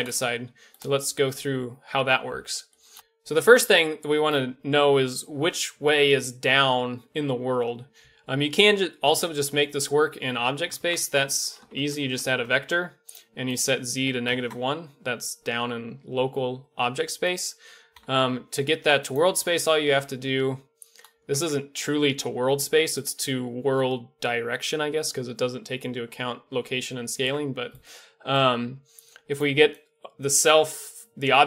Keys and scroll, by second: 10.8 shift+a, 17.9 typing, 19.3 Tab, 21.3 Tab, 27.2 Tab.